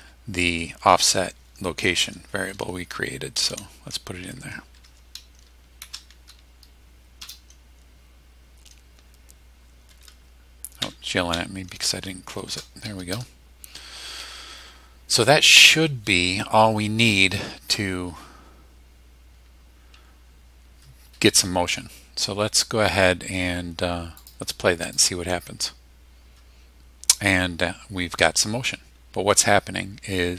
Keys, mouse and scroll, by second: 3.1-4.0 typing, 4.8 Tab, 5.8 shift+0, 7.2 Return, 10.8 BackSpace, 12.5 shift+0, 24.2 click, 24.8 click.